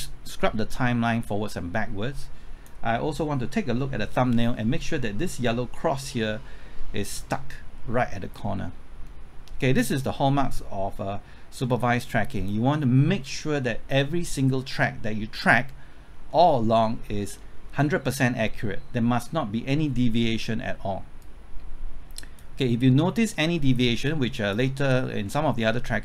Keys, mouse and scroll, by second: 14.6-16.2 scroll down 1, 16.3 middle click, 21.2-22.9 drag, 25.2 scroll down 1.